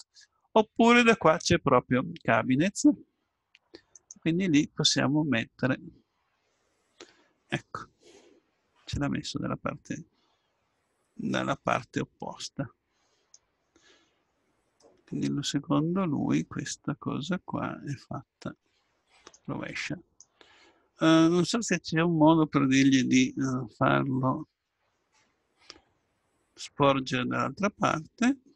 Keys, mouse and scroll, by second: 4.0-5.6 drag, 5.6-7.4 middle drag, 14.8-16.6 middle drag, 21.6 middle click.